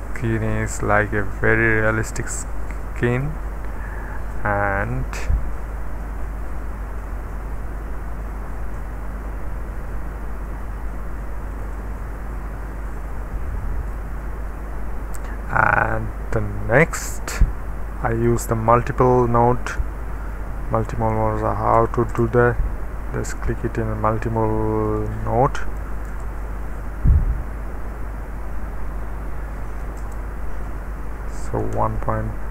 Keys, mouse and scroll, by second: 0.6-3.9 middle drag, 5.1 space, 5.8-7.0 middle drag, 7.0-11.7 drag, 11.9 click, 11.9 space, 12.9-14.0 scroll down 1, 13.5-14.6 middle drag, 15.2 middle click, 17.4 middle click, 18.1 click, 19.6 Return, 21.8 KP_1, 22.1 KP_Enter, 24.7-26.6 typing, 29.7 KP_2, 30.0 Return, 31.4-31.9 typing.